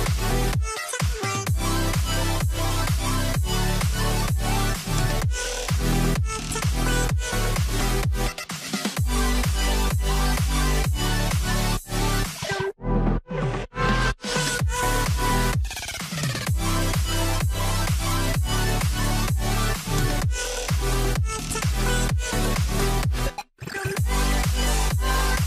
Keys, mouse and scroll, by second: 6.0 middle click, 7.3 scroll down 1, 7.6 middle click, 9.1-9.7 scroll down 1, 10.5 scroll up 1, 11.0 scroll down 1, 11.3 middle click, 13.7 middle click, 13.8 scroll down 1, 14.1 middle click, 14.2-14.8 scroll up 1, 14.9 middle click, 15.5-16.5 scroll up 1, 17.0 double click, 18.9-19.3 scroll up 1, 21.1 middle click, 22.0 ctrl+z, 23.2-25.4 typing, 23.3 Tab, 24.2 middle click, 24.6-25.1 scroll down 2, 24.9 middle click.